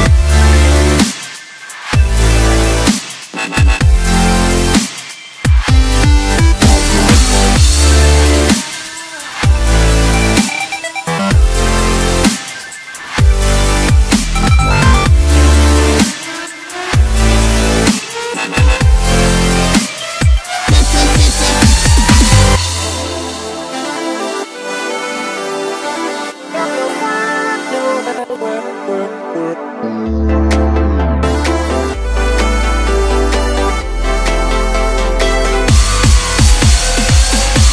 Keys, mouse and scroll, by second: 1.0 s, 4.6 e, 6.7-8.1 scroll down 8, 8.1 e, 11.4 KP_Decimal, 12.3 e, 14.1-15.3 scroll down 12, 15.3-15.9 scroll down 1, 15.9 ctrl+KP_2, 16.3 ctrl+KP_2, 16.4 ctrl+KP_2, 16.6 ctrl+KP_2, 17.5-18.6 scroll up 1, 18.6 ctrl+r, 20.8 s, 24.1-24.6 scroll up 1, 24.6 3, 25.6 click, 27.2 shift+click, 27.4 shift+click, 27.9 middle click, 28.7-30.1 scroll up 3, 30.1 e, 30.7 s, 37.3 KP_1.